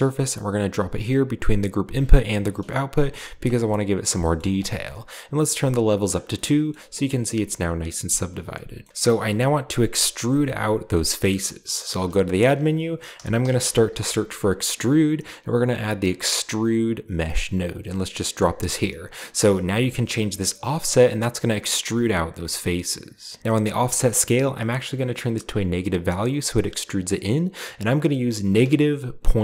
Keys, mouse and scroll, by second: 2.3 click, 3.5-4.5 middle drag, 3.5-4.5 scroll down 1, 4.7 middle drag, 4.7-5.4 scroll up 1, 5.9-6.8 drag, 6.6-7.2 scroll up 1, 8.8-9.3 middle drag, 10.9 middle click, 11.9 shift+a, 13.1-13.9 typing, 16.6 click, 17.6-18.9 drag, 18.6-19.5 scroll down 2, 20.1-23.4 shift+drag, 28.6-29.4 typing.